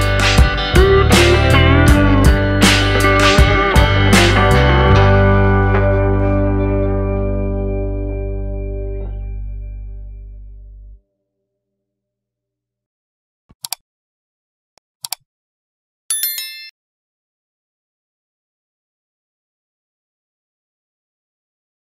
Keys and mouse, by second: 2.6 click, 4.3-8.1 drag, 10.6 Tab, 11.0 middle click, 11.6 middle click, 12.0 shift+middle click, 12.3 middle click, 12.8 shift+middle click, 13.1 middle click, 13.4 shift+middle click, 13.8 middle click, 15.3-21.8 middle drag.